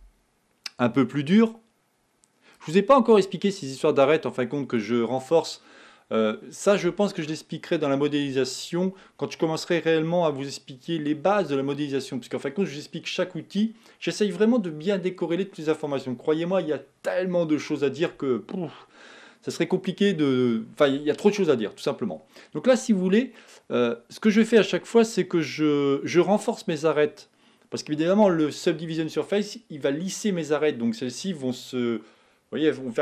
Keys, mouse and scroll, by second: 3.5-6.2 middle drag, 23.8-26.4 middle drag, 26.9-28.2 middle drag, 28.2-29.4 scroll up 1.